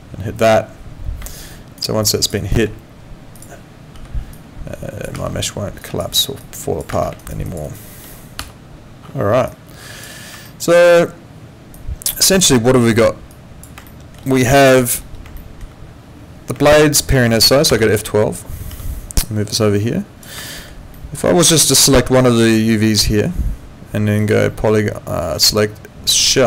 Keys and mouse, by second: 1.3 alt+middle click, 1.5 alt+right click, 2.0 alt+click, 2.4 alt+right click, 3.3 click, 3.9 w, 4.3 click, 5.1 ctrl+z, 5.8 click, 7.2 alt+right click, 7.5 alt+click, 7.6 alt+right click, 8.4 F8, 9.5 alt+click, 10.5 alt+middle click, 11.7 click, 12.9 click, 13.9 alt+middle click, 14.6 alt+middle click, 16.7 alt+middle click, 17.9 click, 18.7 w, 19.2 click, 20.5 alt+middle click, 21.3 alt+right click, 21.7 click, 22.8 click, 24.2 click, 26.2 click.